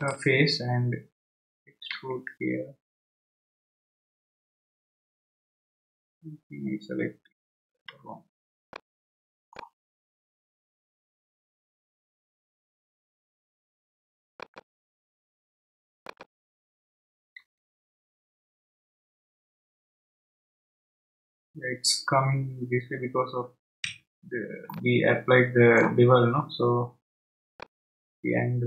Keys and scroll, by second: 1.9 e, 7.8 Escape, 17.4 e, 23.8 Escape.